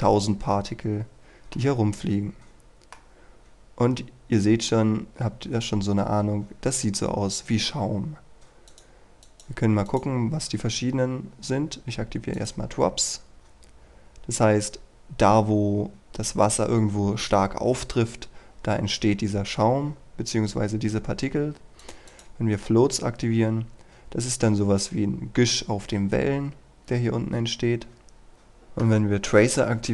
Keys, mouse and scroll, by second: 0.1-1.6 scroll down 1, 1.6-3.1 middle drag, 3.2-4.9 scroll up 1, 8.7 click, 10.7-12.4 scroll down 1, 12.4 click.